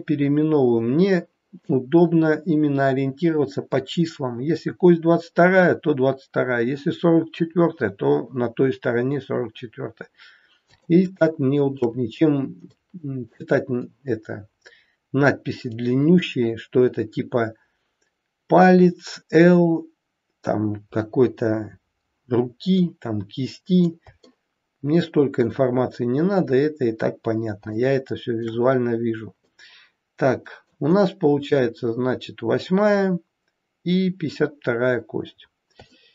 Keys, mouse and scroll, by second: 0.0 scroll down 2, 10.7 shift+middle click, 12.6 middle click, 21.9-22.7 scroll down 1, 22.7 middle click, 24.2 shift+middle click, 27.1-27.5 scroll up 1, 27.7 shift+middle click, 29.4 middle click, 31.0-31.3 scroll up 2, 32.5-34.1 scroll up 3, 34.1-35.2 scroll down 6, 35.7 scroll down 2, 35.9 shift+middle click.